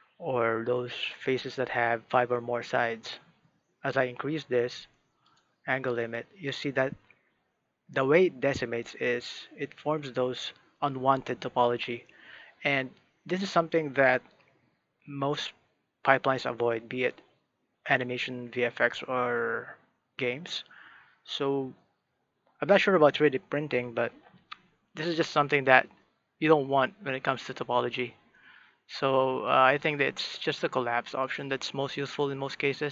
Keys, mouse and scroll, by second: 3.1-5.2 middle drag, 5.2-8.0 drag, 8.0-14.0 middle drag, 25.1-30.2 middle drag, 31.2 click, 31.9-32.9 middle drag.